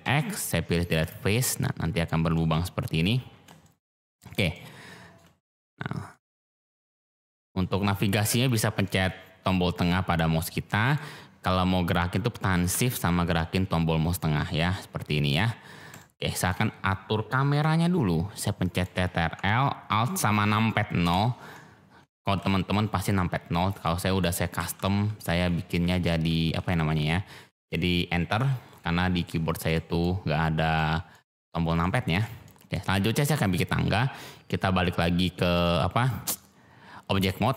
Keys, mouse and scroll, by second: 0.1 x, 1.3 click, 2.3 click, 2.5 shift+middle click, 3.0 shift+click, 3.6 click, 4.5-5.2 shift+drag, 6.1 click, 7.3 shift+click, 8.8-10.9 middle drag, 13.3-15.3 shift+drag, 15.9-16.4 shift+drag, 18.4 click, 21.0 ctrl+alt+r, 22.2-26.5 typing, 27.5 click, 29.7 middle click, 30.7 middle click, 31.7 shift+middle click, 32.4 middle click, 35.5 Tab.